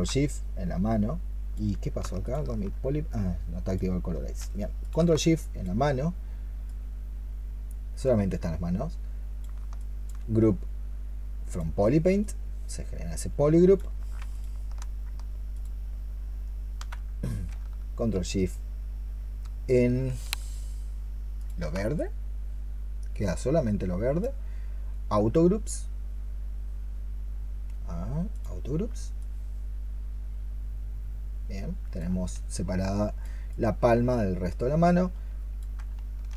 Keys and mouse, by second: 5.0 ctrl+shift+click, 9.6 alt+click, 14.2 ctrl+shift+click, 15.4 ctrl+shift+click, 21.2 ctrl+shift+click.